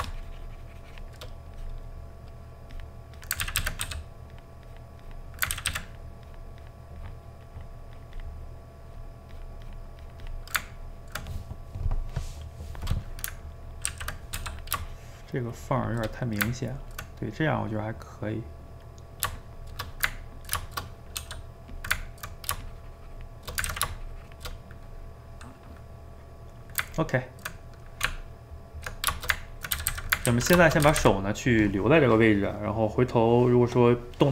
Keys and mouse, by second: 2.0 middle click, 2.7 click, 3.4 ctrl+z, 3.6 ctrl+z, 3.8 f, 4.7 click, 5.6 ctrl+z, 5.7 ctrl+z, 5.9-8.5 drag, 8.5 middle click, 9.4-10.7 drag, 10.7-13.9 ctrl+middle drag, 13.9 ctrl+z, 14.4 f, 14.9-16.2 shift+drag, 16.2-21.2 middle drag, 21.2 f, 22.0 ctrl+middle click, 22.6-23.7 shift+drag, 23.7 ctrl+z, 23.9 shift+click, 24.6-28.1 middle drag, 28.1 Tab, 29.2 ctrl+shift+middle click, 29.8 a, 29.9 a, 30.1 middle click, 30.3 ctrl+s, 30.9 a, 31.0 a, 31.2-34.3 middle drag.